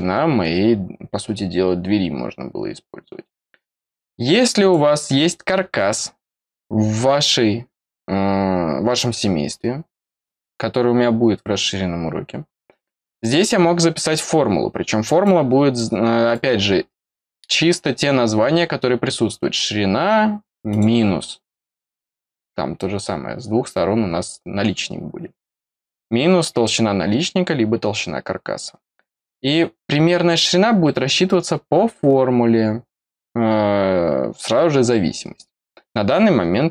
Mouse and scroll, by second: 4.5 click, 13.1 click, 15.2 click, 16.3 click, 20.6 click.